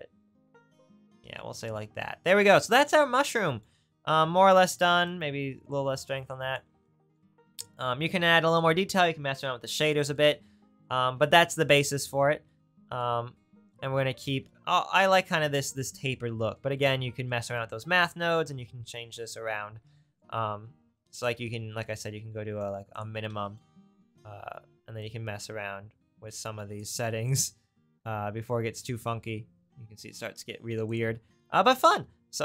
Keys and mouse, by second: 7.7-16.3 drag, 17.8 middle click, 18.2-21.4 middle drag, 21.4-26.0 drag, 26.8-28.4 drag.